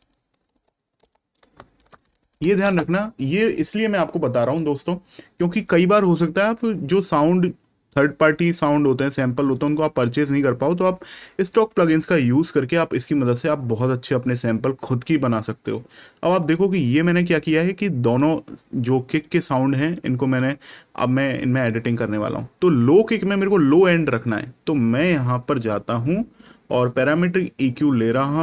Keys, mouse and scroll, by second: 0.0-2.7 typing, 9.5 click, 18.1 click, 21.5 click.